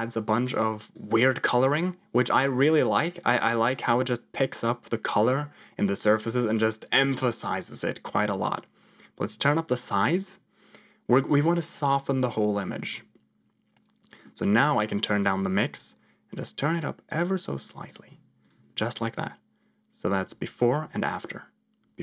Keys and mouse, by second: 9.7 click, 14.8 click, 15.8-17.8 shift+drag, 20.1 m, 20.8 m, 21.7 m.